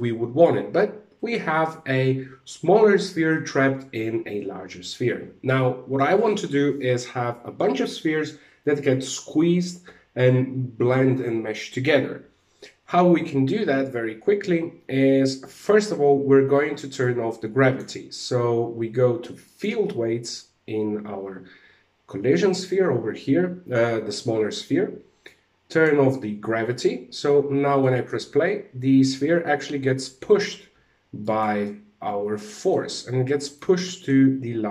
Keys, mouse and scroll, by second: 0.2 alt+a, 15.0 click, 16.5 click, 18.9 click, 24.7 click, 26.6 alt+a, 27.3 middle click, 30.7 right click, 31.1 middle click, 32.9 right click, 33.5 shift+middle click, 34.4-34.7 scroll up 2.